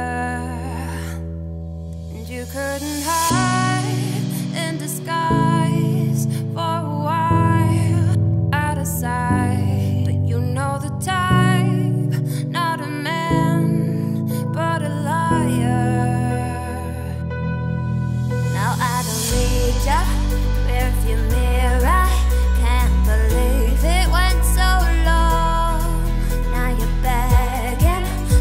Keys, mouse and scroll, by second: 0.4 shift+middle click, 1.4 click, 2.1 shift+scroll up 1, 2.1 shift+middle click, 2.6 e, 7.4 scroll down 2, 7.5 middle click, 8.4-8.9 scroll up 1, 8.9 middle click, 9.3 e, 12.5 `, 13.0 z, 13.4-14.2 scroll up 4, 14.2 e, 17.5 z, 17.7 scroll down 2, 17.9 middle click, 18.4-18.8 scroll up 3, 18.8 shift+middle click, 19.4 scroll down 2, 19.6 middle click, 20.3 click, 20.5 `, 21.0-22.0 scroll down 27, 22.0-23.1 middle drag, 23.1 ctrl+b, 28.2-28.4 scroll down 2.